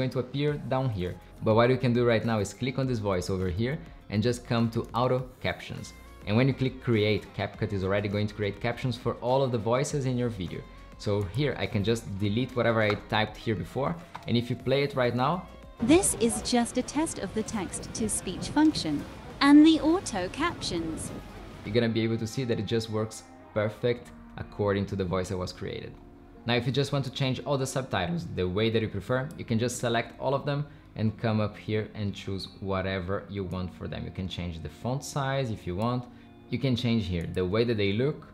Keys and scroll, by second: 15.5 space, 21.6 space.